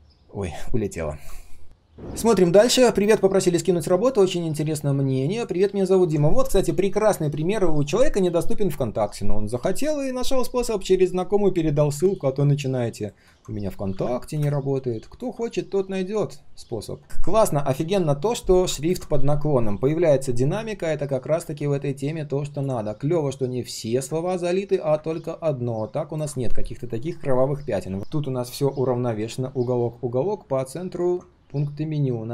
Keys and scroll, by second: 13.9 ctrl+\, 28.0 ctrl+shift+3, 28.1 ctrl+shift+3, 28.3 ctrl+shift+4.